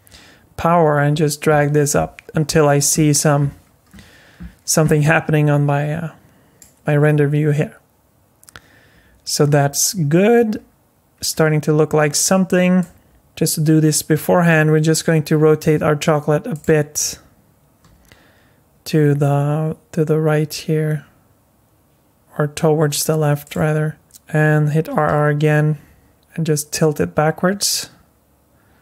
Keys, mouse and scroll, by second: 9.9-11.1 scroll up 5, 11.1-12.6 scroll down 3, 12.8 middle click, 13.9 r, 17.8 r, 24.9 r.